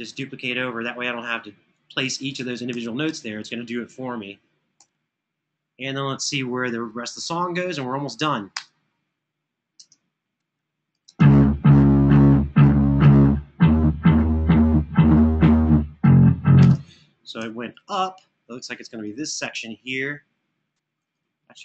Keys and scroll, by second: 2.1 super+d, 2.5 super+d, 4.6 Right, 8.3 space, 9.5 space, 10.7 space, 16.4 space, 17.4 super+[.